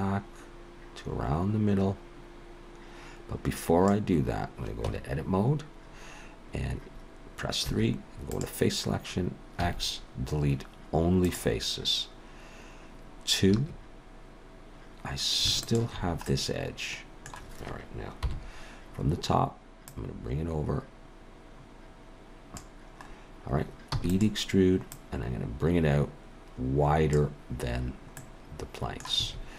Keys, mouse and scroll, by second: 4.9 Tab, 7.6 3, 8.3 click, 9.6 x, 13.5 2, 15.6 alt+shift+click, 16.3 middle click, 18.2 KP_7, 19.9 click, 23.0-23.6 scroll up 3, 23.9 e, 24.9 click, 28.2 middle click, 29.2 a.